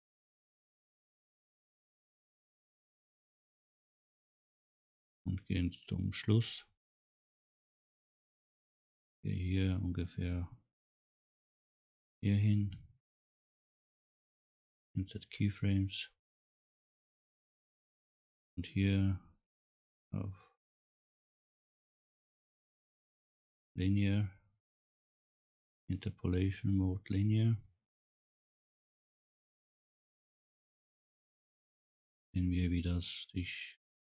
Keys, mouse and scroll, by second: 3.5 n, 6.1 click, 8.3 click, 11.1-13.7 drag, 14.2 right click, 18.2-19.6 right drag, 29.3 click, 31.3 scroll up 1, 31.9 scroll down 1.